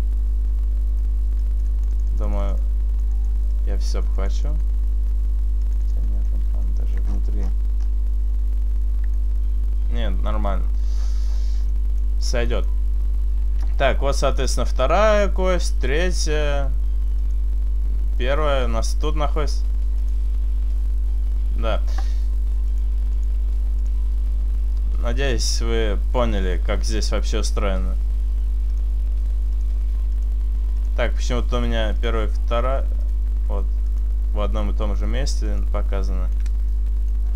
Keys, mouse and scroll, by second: 1.3 click, 1.7 click, 2.0 click, 2.6 click, 3.2 click, 3.6 click, 4.2 click, 4.7 click, 4.7 middle click, 5.7 click, 6.1 click, 6.1 middle click, 6.7 shift+middle click, 6.9-7.8 scroll up 8, 10.6-11.5 scroll down 9, 11.5 middle click, 11.9-12.2 scroll down 1, 12.2 middle click, 14.9 click, 15.7 click, 18.6 click, 18.6 middle click, 20.0 click, 22.8 click, 23.9 click, 26.9 click, 28.8 click, 29.6 click, 30.2 click, 30.9 click, 31.5 click, 32.0 click, 33.1 click, 33.9 click, 35.5 click, 35.9 middle click, 36.6 shift+middle click.